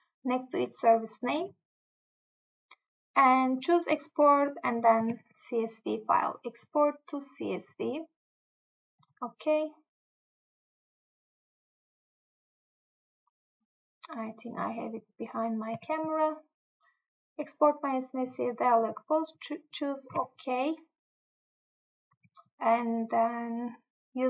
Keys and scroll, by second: 5.1 Tab, 15.9 Tab, 20.2 Tab, 22.3 Tab.